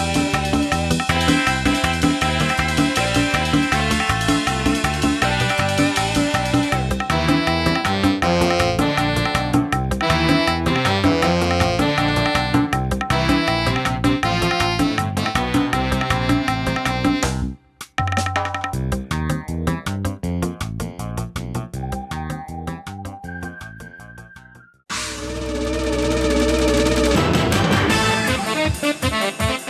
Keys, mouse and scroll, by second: 2.5 click, 3.0 n, 3.5 scroll down 2, 4.1 middle click, 4.5 scroll down 2, 5.1 shift+middle click, 7.0 shift+click, 8.1 scroll up 1, 8.4 middle click, 8.9 scroll up 2, 9.5 shift+middle click, 9.9-10.6 scroll up 4, 10.5 middle click, 11.4 shift+click, 13.0 shift+click, 14.4 shift+click, 15.7 scroll up 2, 16.4-17.0 scroll down 4, 18.6 ctrl+j, 19.7 scroll up 2, 20.1 middle click, 21.8 click, 22.7 click, 24.9 shift+click, 25.8 ctrl+j, 27.3 scroll down 2, 28.1 shift+middle click, 28.8 middle click.